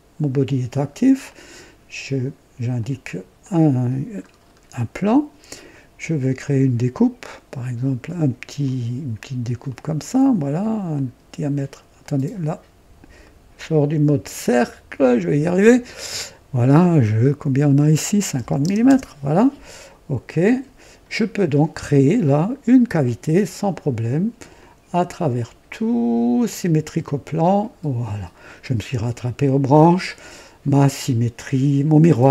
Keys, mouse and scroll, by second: 1.2 click, 2.7 click, 3.3 click, 4.2-4.5 scroll up 1, 4.7-5.4 right drag, 6.3 click, 8.5 click, 9.6 click, 10.1 right click, 10.9 click, 11.9 right click, 13.2 right click, 14.0 right click, 15.0 click, 16.0 click, 18.3 KP_5, 18.6 KP_0, 18.8 KP_Enter, 20.4 click, 22.9 click, 24.5 click, 25.1 click, 26.4 click, 28.0 click.